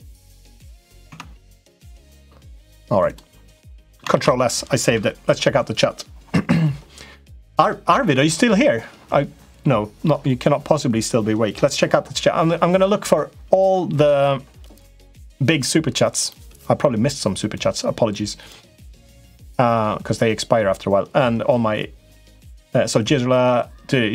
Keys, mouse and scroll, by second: 0.4 middle click, 0.9 Tab, 2.0 middle click, 2.8 click, 3.4 middle click, 3.9 ctrl+s.